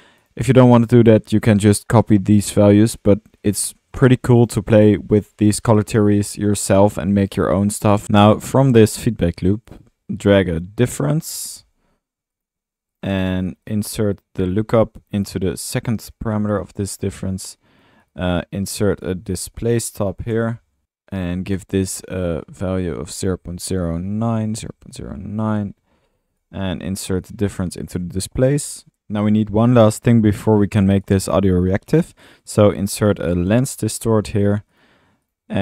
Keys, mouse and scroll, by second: 3.0 click, 4.4 click, 4.5 typing, 8.0 alt+middle drag, 8.3 scroll down 1, 8.5 scroll up 1, 8.5 click, 9.7-10.3 drag, 10.3 Tab, 10.4-11.6 typing, 12.4 click, 13.5-13.9 drag, 14.4-16.1 drag, 16.4 click, 16.8 middle click, 17.1 right click, 17.6 right click, 17.9 drag, 18.6-18.9 right drag, 18.9 right click, 19.3-20.6 typing, 22.1-22.4 drag, 31.9 drag, 32.0 right click, 32.5 click, 32.6 right click, 32.9-34.0 typing, 34.7 drag, 35.3 click.